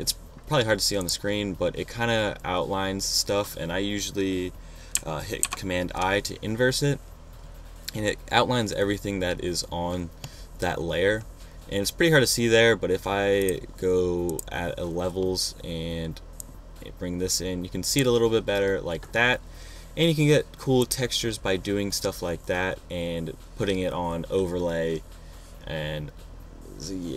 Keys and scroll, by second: 5.7 super+i.